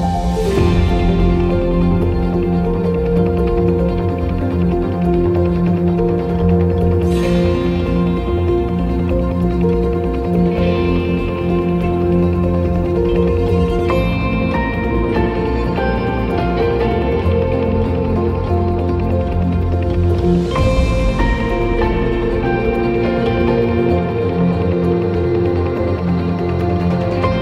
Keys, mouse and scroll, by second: 0.1 shift+middle click, 0.4 shift+middle drag, 0.6 shift+middle click, 0.8 shift+middle click, 1.0 shift+middle click, 1.1 drag, 1.4 shift+middle click, 2.1 click, 2.4 middle click, 2.6 z, 2.9 click, 3.1 middle click, 3.3-3.9 drag, 3.9 middle click, 4.0-4.5 drag, 4.5-5.3 middle drag, 5.3 click, 5.6 ctrl+shift+middle click, 6.4-7.5 ctrl+shift+right drag, 7.5 shift+middle click, 7.6 click, 8.2 shift+middle drag, 8.3 click, 8.3 shift+middle click, 8.4 click, 9.1 shift+middle click, 9.2 click, 9.3 middle click, 9.5 ctrl+z, 9.6 middle click, 9.6 click, 9.8 middle click, 10.1 shift+middle click, 10.6 shift+middle click, 10.7 click, 11.0 shift+middle click, 11.4 shift+middle drag, 11.7 click, 11.8 shift+middle click, 11.9 click, 12.0 shift+middle click, 12.1 click, 12.8 shift+middle click, 13.0 click, 13.8 shift+middle click, 13.9 shift+middle click, 14.0 click, 14.4 shift+middle click, 14.6 shift+middle click, 14.7-15.9 drag, 15.9 shift+middle click, 16.0 click, 16.3 shift+middle click, 16.4 click, 16.5 shift+middle click, 17.1 click, 18.0 middle click, 18.2 z, 18.2 shift+middle click, 18.4 shift+middle click, 18.4 click, 18.6 middle click, 18.8 drag, 19.0 middle click, 19.1 shift+middle click, 19.2-19.6 drag, 19.9 click, 20.3 click, 20.3 shift+middle click, 20.7 click, 20.9 ctrl+shift+middle click, 21.2 ctrl+middle click, 21.5 shift+middle click, 21.9 click, 22.3 middle click, 22.5 click, 22.5 shift+middle drag, 22.8-23.4 drag, 23.4 middle click, 23.6 shift+middle drag, 24.2 middle click, 24.4 middle click, 24.7 ctrl+middle click, 24.9 KP_0, 25.3 middle click, 25.3 scroll up 2, 25.4 KP_0, 25.5 middle click, 25.7 click, 25.9-27.4 middle drag, 26.0 scroll up 2, 26.6 KP_0, 26.9 KP_0.